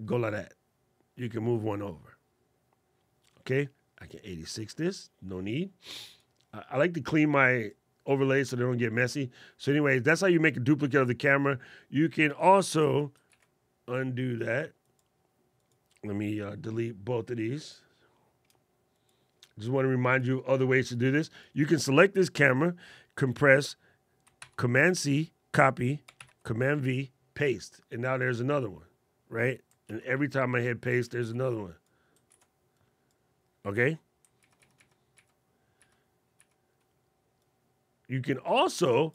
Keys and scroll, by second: 12.6 super+z, 13.0 super+z, 24.1 super+c, 25.9 super+v, 29.5 super+v, 31.0 super+v, 32.0 super+c, 34.1 super+z.